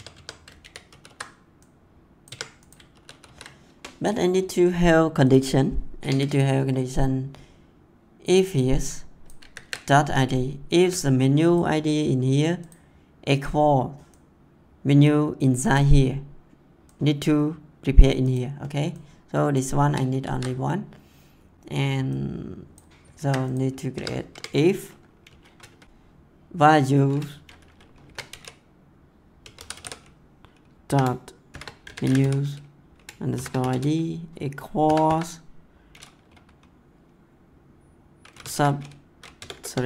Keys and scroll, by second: 0.5 ctrl+v, 2.2 Tab, 2.9 ctrl+s, 5.9 Return, 9.3 ctrl+c, 19.8 ctrl+x, 23.2 ctrl+c, 23.9 Tab, 27.8-28.7 typing, 30.8 shift+-, 31.5 shift+., 31.8 m, 33.1-34.8 typing, 38.2 s, 39.3 BackSpace.